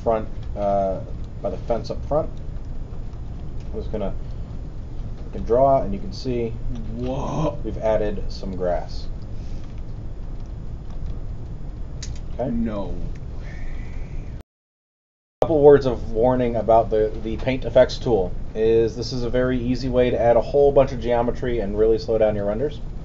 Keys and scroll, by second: 13.1 alt+w, 13.9 w, 14.4 super+..